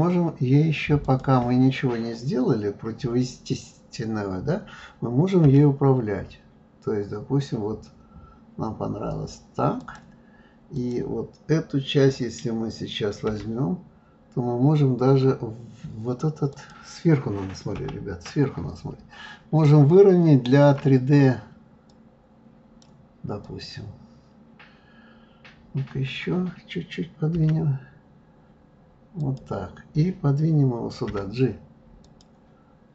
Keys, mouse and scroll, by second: 1.0 click, 5.4 g, 10.7 click, 13.3 g, 17.8 KP_7, 19.2 scroll up 1, 19.9-21.9 shift+middle drag, 21.9 click, 23.4 click, 31.1 g.